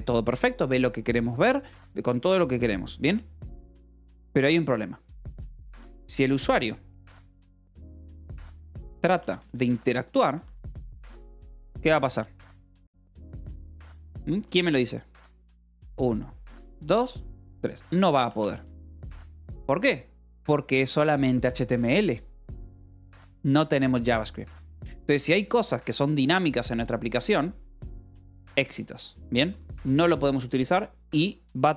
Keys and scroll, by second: 6.1 o, 6.1 BackSpace, 6.7 Return, 7.5-14.7 typing, 17.6-19.2 typing, 20.9 k, 21.6 j, 22.3 shift+v, 22.9 Escape, 30.1 shift+v, 30.4 Escape.